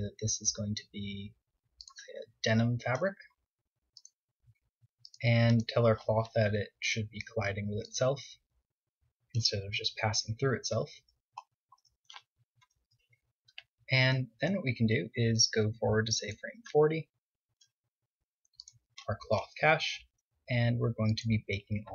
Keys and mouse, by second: 3.2-9.7 drag, 9.7-11.7 middle drag, 11.7 KP_0, 17.6-19.7 drag, 20.1-21.9 drag.